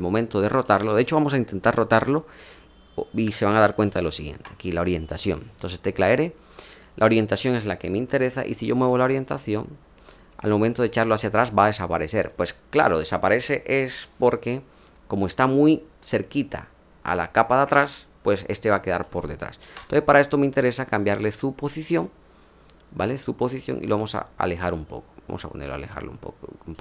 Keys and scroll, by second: 19.5 ctrl+z.